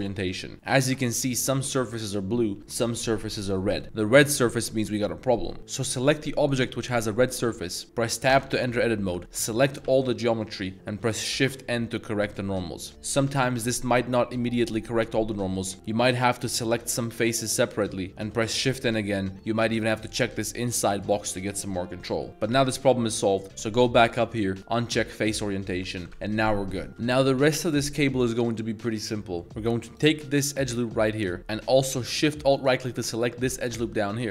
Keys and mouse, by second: 0.5 middle click, 1.2 click, 2.6 click, 3.8-5.6 drag, 6.0 click, 7.2 middle drag, 8.3 Tab, 9.1 middle click, 9.9 a, 10.2 middle click, 11.4 shift+n, 12.9 middle click, 13.5 middle click, 16.1 right click, 16.9 3, 17.5 shift+right click, 17.7 shift+right drag, 18.1 shift+n, 20.0 click, 21.1-21.8 drag, 22.1 middle click, 22.3 Tab, 23.3-25.5 drag, 25.7 middle click, 26.1 a, 27.1 middle click, 27.6-29.4 drag, 29.4 middle click, 29.4 alt+1, 29.9 alt+click, 30.4 middle drag, 31.0 shift+middle drag, 31.4 z, 33.6 shift+middle click, 34.0 z.